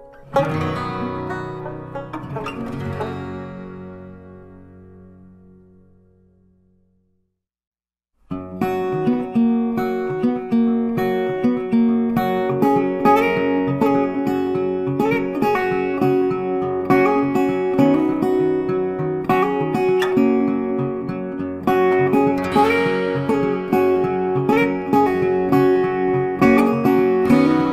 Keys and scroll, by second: 19.2 ctrl+z, 24.2 ctrl+z.